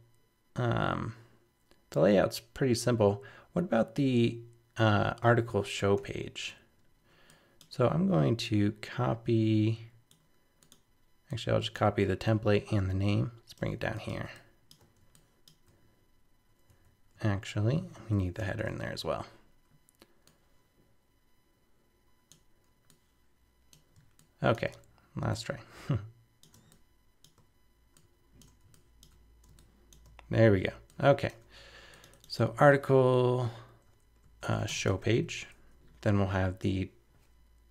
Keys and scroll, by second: 5.8 super+v, 6.0 super+-, 16.7 super+z, 18.4 super+-, 33.2 super+Right.